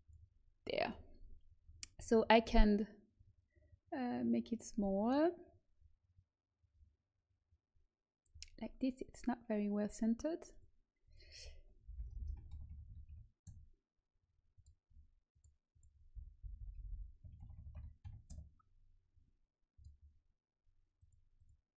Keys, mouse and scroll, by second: 0.0-2.7 drag, 3.3-5.3 drag, 10.4-12.0 drag, 12.0 BackSpace, 12.1 BackSpace, 14.5-16.8 drag, 16.3 BackSpace, 16.7 BackSpace, 16.8 BackSpace, 19.7 click.